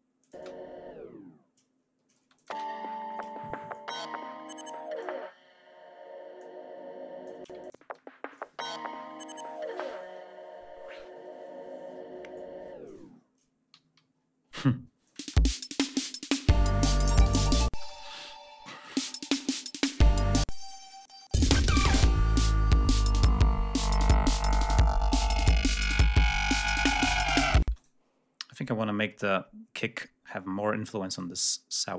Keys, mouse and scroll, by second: 0.1 click, 0.2 space, 1.5 ctrl+scroll down 2, 2.1 ctrl+space, 2.3 ctrl+click, 3.6 ctrl+scroll up 1, 4.6 click, 7.3 space, 8.3 ctrl+scroll down 1, 13.6 g, 13.9 scroll down 2, 14.5 ctrl+space, 14.9 ctrl+click, 15.1 space, 17.6 space, 18.7 click, 18.9 space, 19.0-19.4 scroll down 1, 20.3 space, 21.3 space, 21.6 ctrl+scroll up 2, 22.3 ctrl+scroll down 2, 23.0-23.8 scroll down 2, 24.0-26.2 ctrl+scroll up 7, 27.5 space, 27.6 click, 28.0-28.5 scroll down 2, 28.9 scroll up 2, 30.1-30.4 scroll up 2, 31.0 click.